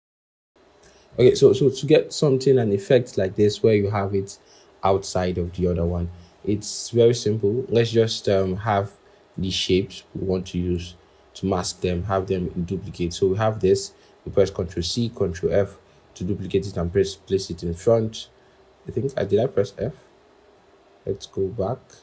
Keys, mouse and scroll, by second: 2.8-4.9 scroll, 8.1 ctrl+[, 8.7 ctrl+[, 9.2 ctrl+[, 14.7 ctrl+c, 15.3 ctrl+f, 21.1 ctrl+z.